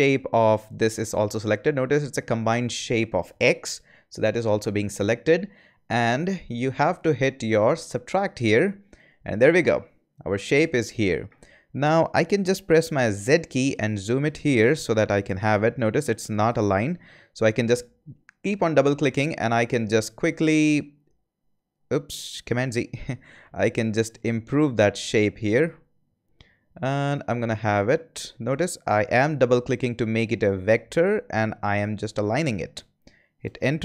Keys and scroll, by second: 13.1 z, 22.5 super+z, 33.4 Return.